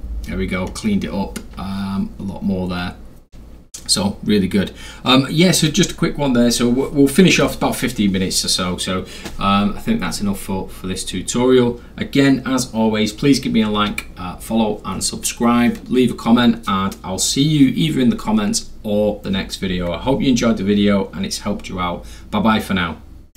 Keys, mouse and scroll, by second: 23.3 click.